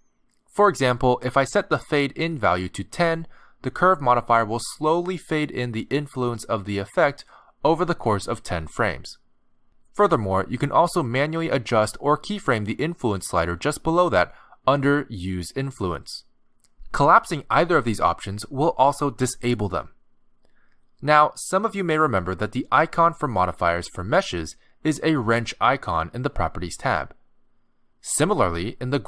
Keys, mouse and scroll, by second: 0.8 click, 4.1 click, 11.6 click, 12.1-12.9 scroll down 3, 12.9 click, 17.7 click, 19.0 click.